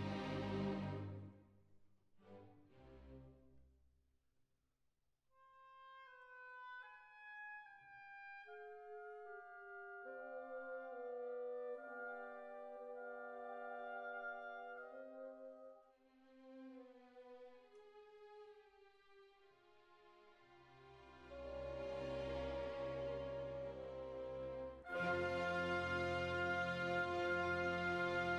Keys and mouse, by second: 0.0 right click, 0.6 click, 0.8 middle click, 1.1 right click, 2.3 right click, 3.4 click, 4.1-5.1 right drag, 5.9 middle click, 6.6 click, 7.5 middle click, 8.1 e, 8.5-9.8 drag, 10.0-13.5 drag, 10.8 right click, 11.5-12.5 right drag, 14.5 ctrl+r, 15.3 right click, 16.5 click, 16.7 right click, 17.4 right click, 18.3-19.4 middle drag, 20.8 ctrl+r, 21.3-22.5 right drag, 21.7 click, 23.0 middle click, 24.1 ctrl+r, 26.5-28.3 middle drag.